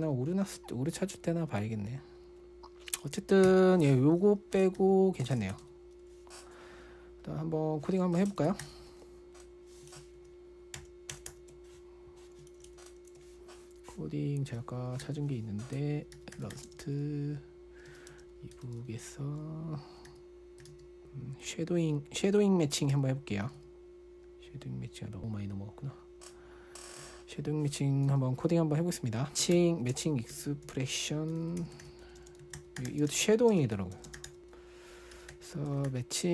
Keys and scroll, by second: 3.9 Escape, 5.2-6.5 typing, 8.4-9.5 typing, 10.6 alt+super+Right, 11.2 alt+super+Right, 13.1 alt+super+Right, 15.4-19.0 typing, 20.5-25.6 typing, 29.3-36.3 typing.